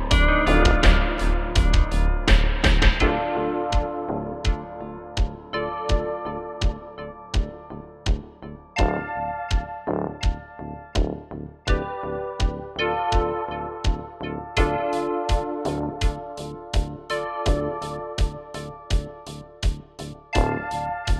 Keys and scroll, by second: 12.2-13.6 typing.